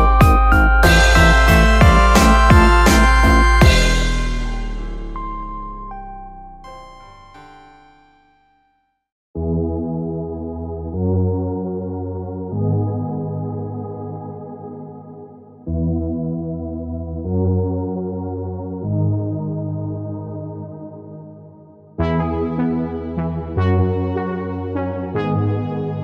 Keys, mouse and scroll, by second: 0.5-1.3 scroll up 2, 1.3 ctrl+t, 4.3-5.3 middle drag, 5.3 alt+s, 6.5 alt+s, 8.5 Tab, 9.3-11.5 drag, 11.5 Tab, 12.4 ctrl+r, 14.3 KP_1, 18.9 click, 20.6 x, 22.6 click, 23.3 click.